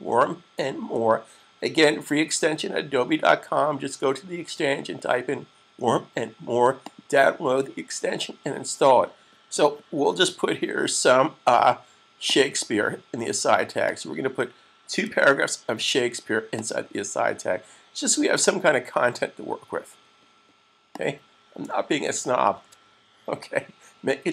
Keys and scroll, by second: 15.1 2, 22.5 super+s.